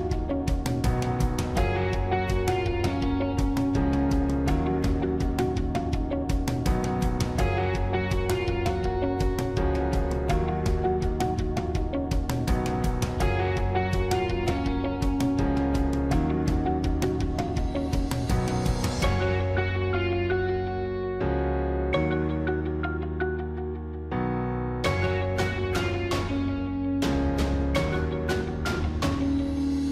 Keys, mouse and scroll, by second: 0.7 ctrl+-, 1.5 ctrl+-, 9.5 ctrl+-, 10.4 ctrl+-, 11.2 ctrl++, 11.3 ctrl+-, 11.5 ctrl++, 13.3 ctrl+-, 14.5 ctrl+-, 16.2 ctrl+-, 16.5 ctrl++, 16.9 ctrl++, 17.4 ctrl+-, 18.6 ctrl++, 19.3 ctrl++, 20.3 ctrl+-, 21.0 ctrl++, 21.9 ctrl+-, 22.0 ctrl++, 24.4 ctrl++, 24.8 ctrl++, 26.2 b, 26.4 ctrl+-, 28.1 ctrl+-, 28.2 ctrl++, 28.5 ctrl+-, 29.5 ctrl++.